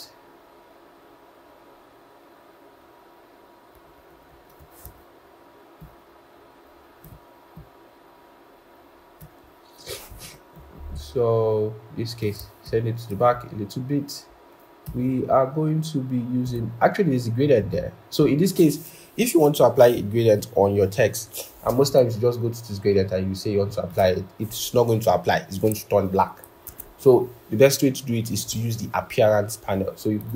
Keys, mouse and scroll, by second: 3.7 alt+Up, 4.0 alt+Up, 4.2 alt+Up, 4.3 alt+Up, 5.7 shift+click, 12.5 ctrl+[, 14.7 i, 17.3-17.9 typing, 19.5-22.3 scroll, 26.5 typing.